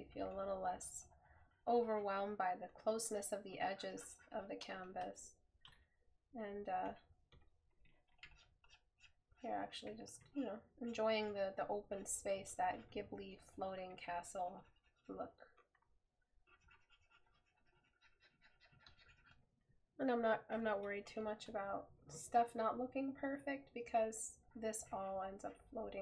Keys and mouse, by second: 5.8 right click, 20.6 right click.